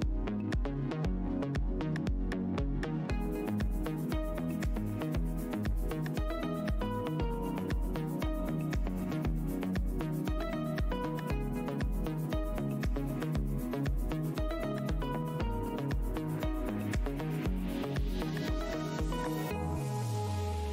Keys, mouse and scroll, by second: 2.9 Tab, 3.1 w, 3.7 click, 4.3 click, 4.9 click, 5.1 click, 5.8 alt+scroll up 1, 6.7 alt+Tab, 7.4 click, 7.8 shift+Tab, 8.1 shift+click, 8.6 alt+click, 9.3 Tab, 9.4 click, 11.0 Tab, 11.6 ctrl+click, 12.3 Tab, 12.5 click, 13.3 Tab, 13.5 alt+click, 14.0 scroll, 14.1 alt+scroll down 1, 14.8 alt+`, 14.8 scroll down 1, 15.4-16.9 typing, 16.1 Tab, 17.4 Tab, 17.6-18.2 scroll down 1, 18.2 scroll down 1, 18.3 click, 19.0 click, 19.7 ctrl+shift+Tab, 20.1 scroll down 1, 20.3 alt+Tab.